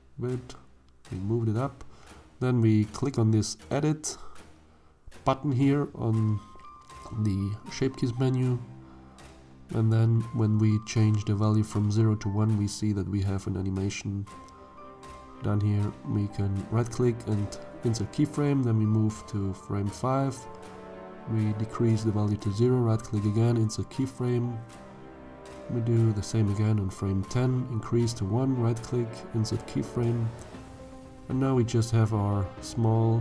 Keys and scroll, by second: 31.0 shift+z.